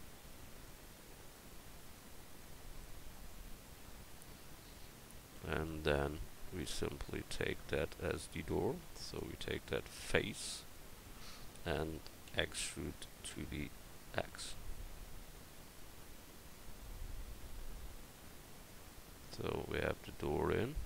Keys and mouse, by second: 6.7 middle click, 9.1-12.3 drag, 10.2-12.3 right drag, 12.3 e, 13.9-15.7 drag, 19.1 Tab.